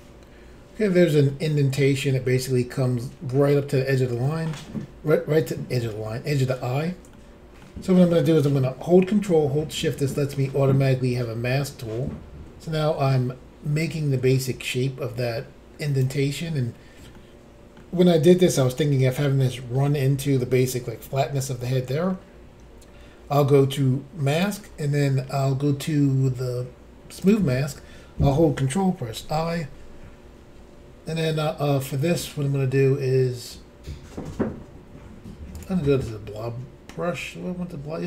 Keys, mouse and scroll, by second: 1.3 middle click, 2.8 scroll up 1, 3.9 scroll down 1, 7.1 shift+middle click, 9.7 ctrl+click, 17.1 middle click, 19.4 middle click, 21.4 middle click, 24.3 click, 24.4 click, 27.2 click, 28.3 click, 29.2 ctrl+i, 35.6 click.